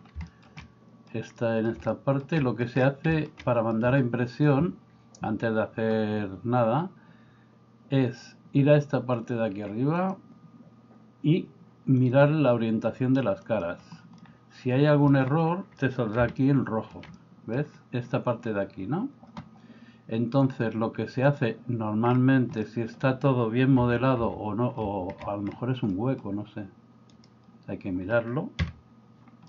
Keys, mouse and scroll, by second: 0.3-1.1 shift+middle drag, 1.4 middle click, 1.9 shift+middle click, 2.4 middle click, 3.1 shift+middle click, 10.1 click, 12.1-13.9 drag, 14.2-15.1 middle drag, 15.9 middle click, 16.5 shift+middle click, 17.2 middle click, 18.2 middle click, 20.5-22.1 drag, 22.7 middle click, 23.9 a, 24.3 a, 25.9 middle click, 27.3-28.7 right drag, 28.7 KP_Decimal.